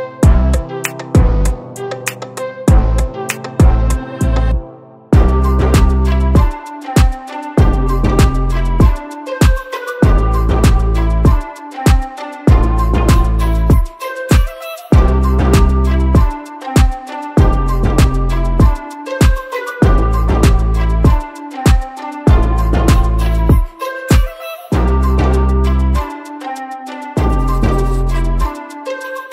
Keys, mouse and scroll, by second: 0.4 click, 0.9 click, 2.2 click, 3.7 click, 4.7-7.2 drag, 8.8 click, 10.5 click, 12.1 s, 13.6 click, 14.4 click, 16.5 ctrl+z, 17.1 click, 18.3-19.7 drag, 20.2 click, 22.3 click, 23.2 click, 25.4 click, 25.8 click, 26.9 click, 27.2 click.